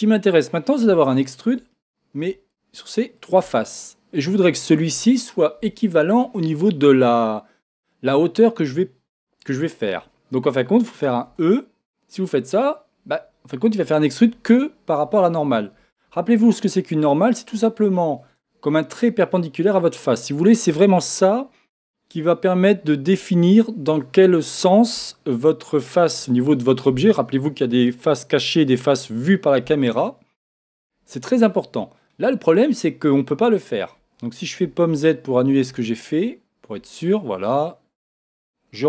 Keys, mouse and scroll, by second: 1.1 shift+click, 1.9-3.2 middle drag, 3.2 shift+click, 3.6-38.8 middle drag, 15.8 Escape, 34.9 z.